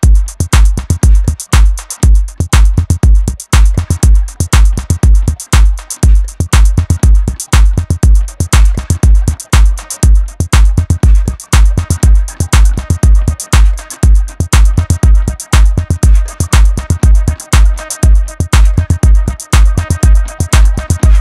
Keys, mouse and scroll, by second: 3.0-3.3 scroll up 1, 3.3 Tab, 3.8 shift+middle click, 4.1-4.9 scroll up 1, 4.9 ctrl+r, 6.3 scroll down 3, 6.6 Tab, 7.0 scroll down 3, 7.2 KP_1, 7.8-8.9 shift+middle drag, 8.9 scroll up 1, 9.2 Tab, 9.6-11.0 shift+middle drag, 11.0 click, 11.7 click, 12.6 KP_1, 13.9 click, 14.6 click, 16.6 shift+scroll up 1, 16.6 shift+middle click, 17.1-17.4 scroll down 1, 17.4 Tab, 17.9 middle click, 18.9 Tab, 19.9 click, 20.6 ctrl+shift+click.